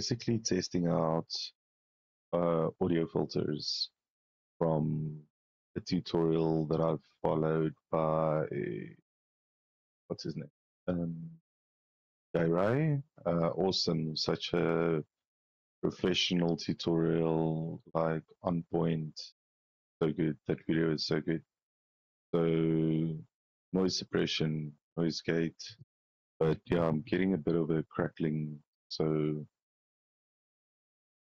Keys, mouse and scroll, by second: 0.0 right click, 2.8 click, 5.2-5.8 drag, 9.8 click, 10.9 scroll down 2, 12.9 scroll up 2, 19.3 click, 24.8 click, 30.0 click.